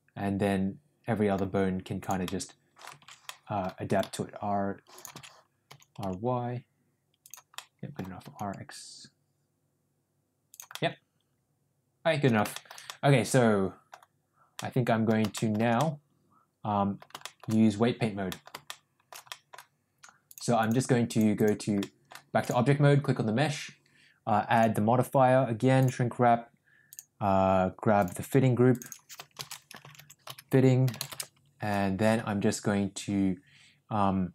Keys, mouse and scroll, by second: 2.0 click, 2.1-2.7 middle drag, 3.2 ctrl+z, 3.3 middle click, 3.8 r, 5.4 ctrl+z, 5.6 r, 7.5 middle click, 8.1 r, 10.6-12.2 middle drag, 12.4 shift+middle click, 12.8-13.9 middle drag, 14.5 scroll up 1, 14.6 middle click, 15.3-15.8 shift+scroll up 2, 15.4 shift+middle click, 15.8-16.9 middle drag, 17.1 shift+middle click, 18.2-18.7 scroll up 2, 18.7 shift+middle click, 19.2 scroll up 1, 19.2 middle click, 20.1 click, 21.3 drag, 21.7-22.1 middle drag, 22.4 click, 24.4-26.0 drag, 27.9 drag, 28.7 click, 28.8-31.6 drag.